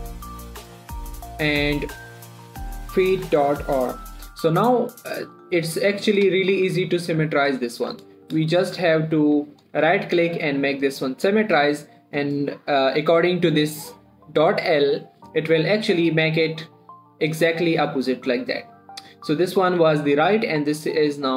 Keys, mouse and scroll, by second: 4.5 shift+r, 4.7 click, 5.1-5.9 scroll down 1, 5.9 click, 7.0 scroll down 1, 7.3 shift+middle click, 7.5-8.1 scroll up 1, 8.2 shift+middle click, 8.3 shift+scroll up 1, 8.7 scroll down 1, 8.9 shift+middle click, 10.0 right click, 10.9 click, 11.9 shift+middle click, 16.5 click.